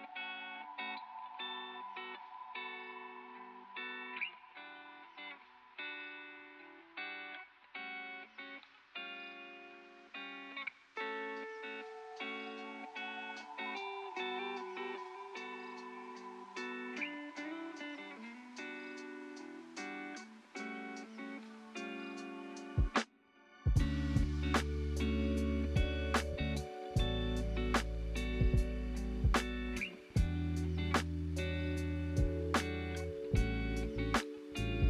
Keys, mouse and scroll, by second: 0.2 click, 1.6-4.6 middle drag, 4.6 click, 6.1 middle click, 6.9 click, 7.5 click, 8.8-10.2 middle drag, 10.2 click, 12.0 click, 12.8 click, 13.8-15.4 drag, 15.4 ctrl+z, 16.1 click, 17.3 click, 18.8-21.9 middle drag, 22.2 click, 22.6 scroll down 3, 25.2 scroll up 4, 26.0 shift+middle click, 26.6 click, 27.2 click, 27.8 middle click, 28.3 scroll down 3, 28.8-30.3 middle drag, 30.3 click, 31.8 click, 33.8 click, 34.6 click.